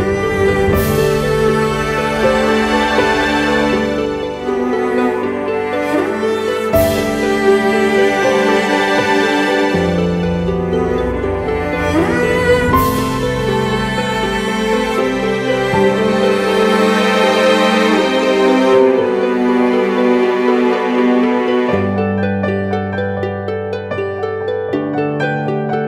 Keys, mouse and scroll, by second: 10.4 alt+right click, 11.8 double click, 14.9 alt+click, 24.2 right click.